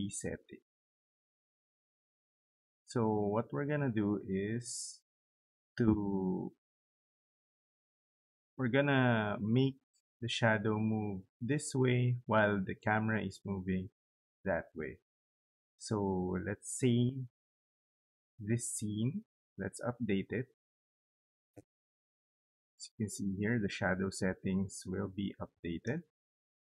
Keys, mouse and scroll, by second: 17.7 right click, 19.9 click, 25.4 click.